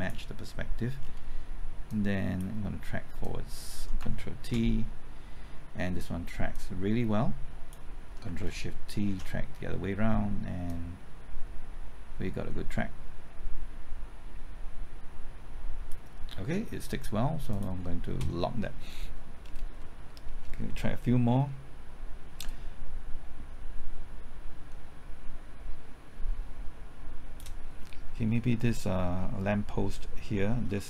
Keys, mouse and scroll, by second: 1.0 scroll down 1, 1.9 click, 4.4 ctrl+t, 6.5-7.7 drag, 9.0 ctrl+shift+t, 10.6-16.7 drag, 19.4-19.8 scroll down 1, 19.8 middle click, 20.3-20.6 scroll up 1, 20.6-21.7 middle drag, 22.4-27.7 drag, 27.8 middle click, 28.1-28.7 scroll up 1, 28.7 middle click, 29.0-30.8 scroll up 1.